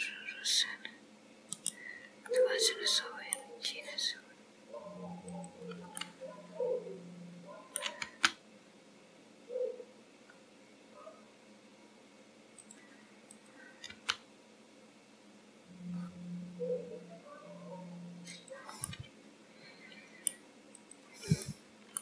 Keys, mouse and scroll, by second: 2.4 middle click, 5.4 click, 6.2 middle click, 8.1 g, 13.3 click, 13.9 g, 18.8 middle click, 20.8 click, 21.5 middle click.